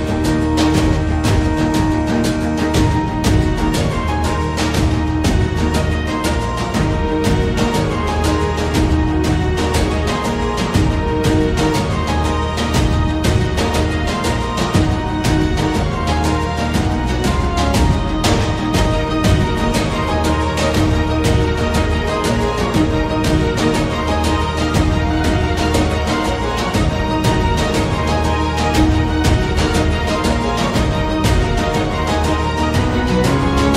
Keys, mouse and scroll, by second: 0.9 ctrl+a, 8.0 Tab, 8.6 z, 8.8 1, 9.1 click, 9.6 z, 10.4-11.8 middle drag, 11.8 g, 31.2 Tab, 32.1 a, 32.2 a, 32.4 middle click, 33.1 middle click, 33.4 ctrl+s.